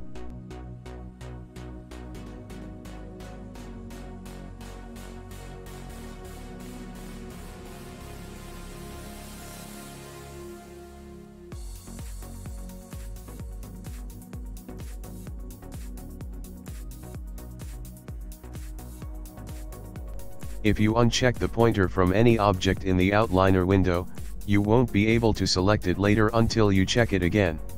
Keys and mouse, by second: 0.9 r, 4.7 middle click, 5.4 shift+click, 5.8 shift+click, 7.2 alt+d, 9.7 r, 14.3 middle click, 15.2 middle click, 17.1 middle click, 17.5 shift+click, 17.9 shift+click, 18.7 shift+click, 19.2 shift+click, 19.7 click, 21.1 click, 23.5 click, 24.1 click, 25.2 click, 26.3 click, 27.0 middle click.